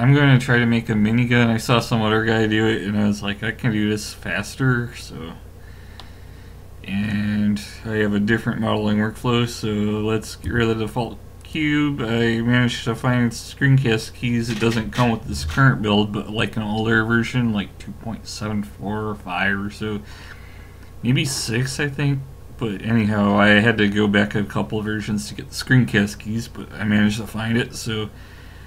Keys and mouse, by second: 6.0-10.5 middle drag, 10.5 x, 28.3-28.6 middle drag.